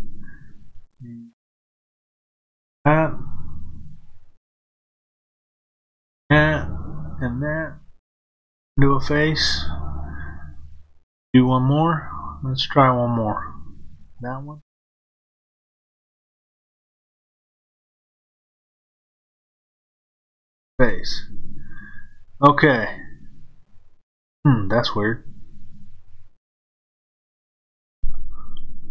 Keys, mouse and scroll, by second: 1.8 click, 5.8 shift+click, 7.0 shift+click, 8.5 f, 14.0 click, 17.1 shift+click, 18.9 shift+click, 20.5 f.